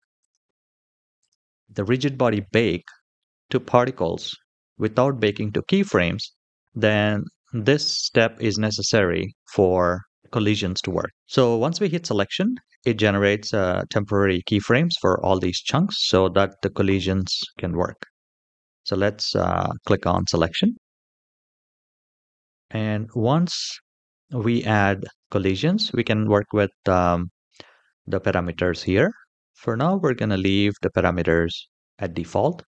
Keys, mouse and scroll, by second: 0.0 click, 1.0 click, 5.6 click, 10.1 shift+middle click, 14.3 middle click, 15.3-15.8 middle drag, 17.2 middle click, 19.9 click, 21.9-22.6 scroll down 4, 22.2-23.1 middle drag.